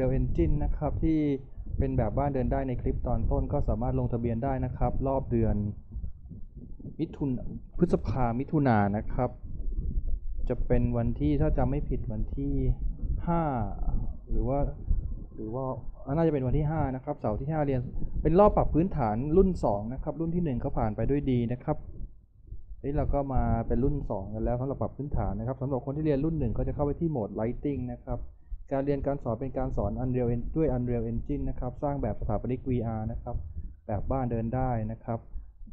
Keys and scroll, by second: 3.4 w.